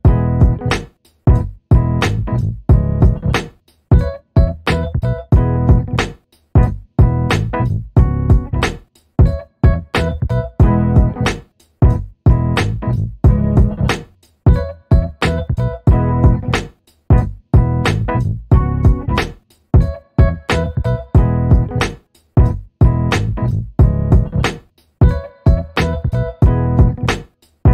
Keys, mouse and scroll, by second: 1.1 alt+middle click, 1.7 alt+scroll up 1, 2.4 click, 3.5 middle click, 5.5 click, 6.8 shift+v, 8.5 click, 8.6 double click, 9.0 right click, 9.7 click, 9.9 typing, 10.1 middle click, 12.2 click, 13.5 ctrl+v, 14.1 Return, 17.8 click, 18.7 9, 18.8 0, 19.1 Return, 20.3 alt+middle click, 21.2 click, 22.4 alt+middle click, 27.5 click.